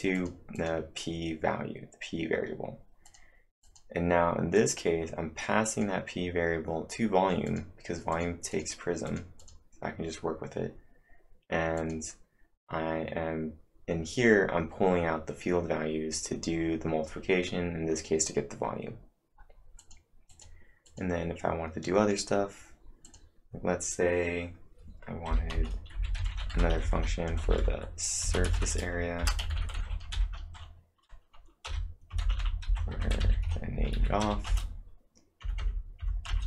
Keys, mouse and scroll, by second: 0.2 click, 0.6 click, 2.8-3.6 typing, 3.0 click, 3.6 click, 4.6 click, 5.7 click, 7.5 click, 7.8-8.6 typing, 8.1 click, 8.5 click, 9.1 click, 9.4 click, 11.7 click, 19.5-20.3 typing, 19.8 click, 20.3 click, 20.9 click, 23.0 click, 25.3-27.2 typing, 25.5 Return, 29.2-30.1 typing, 31.6-34.7 typing, 36.3 Return.